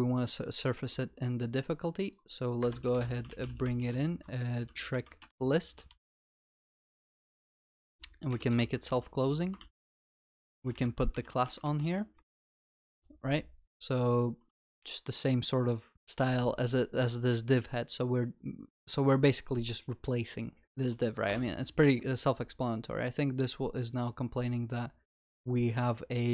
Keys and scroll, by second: 5.3 Return, 6.7 Return, 10.4 ctrl+w, 10.6 ctrl+x, 12.4 ctrl+x, 12.6 ctrl+v.